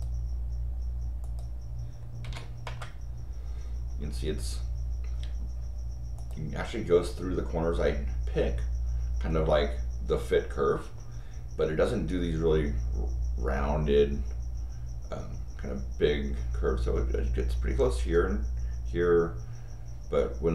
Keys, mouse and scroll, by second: 1.2 click, 2.6 Return, 5.4 scroll up 2, 6.1 click.